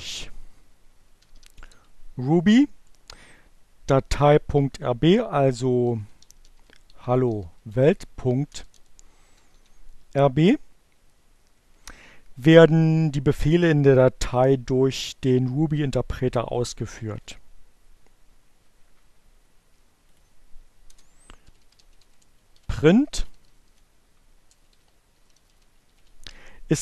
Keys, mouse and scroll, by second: 0.5-2.0 typing, 3.5 h, 5.6-8.7 typing, 16.2 Return, 19.9 click, 20.4 Return, 21.0-25.4 typing.